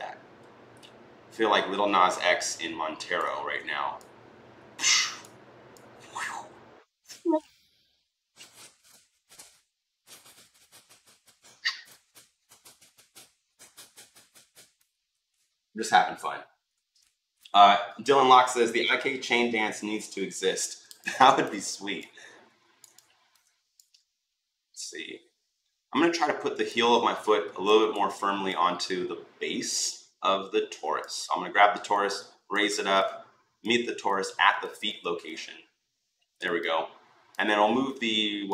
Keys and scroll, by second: 17.0 ctrl+z.